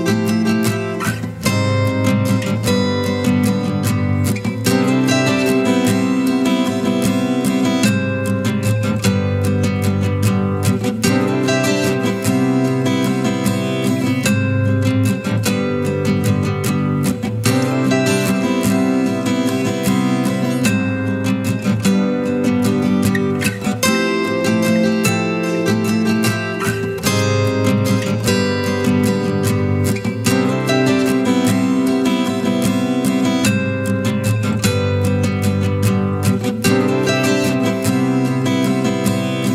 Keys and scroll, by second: 17.2 ctrl+t, 26.6 ctrl+KP_Add.